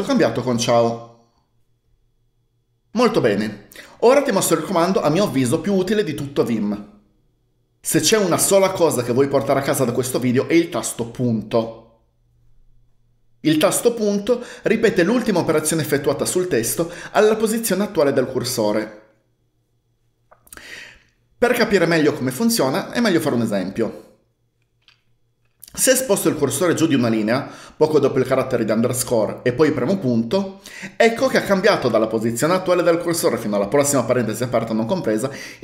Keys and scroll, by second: 26.7-28.3 typing, 30.1 typing.